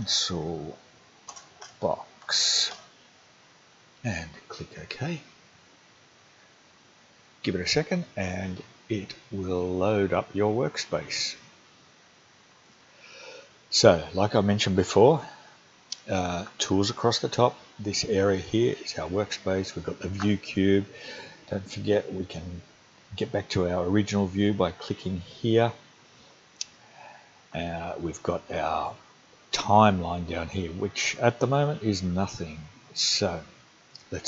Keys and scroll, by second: 0.0-2.8 typing.